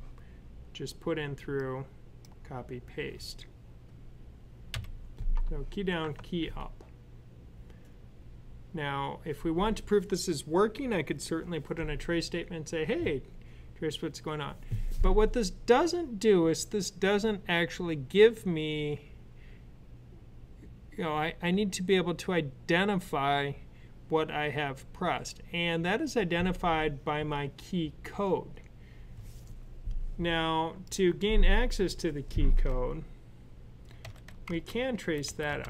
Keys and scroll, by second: 4.6 u, 33.9-35.5 typing.